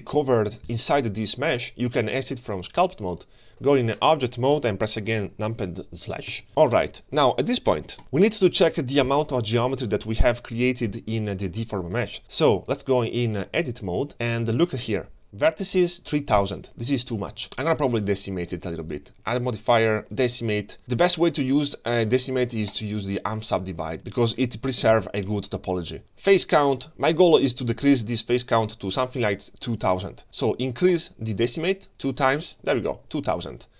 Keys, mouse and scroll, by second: 2.5 click, 6.4 KP_Divide, 6.5 ctrl+space, 6.5 shift+middle click, 6.5-8.0 scroll down 2, 6.5 KP_3, 8.2-9.0 scroll up 2, 9.0 scroll up 1, 9.8 click, 10.3 g, 12.7 click, 17.4 Tab, 19.2 click, 22.7 click, 26.0 click, 30.9 click, 31.9 click.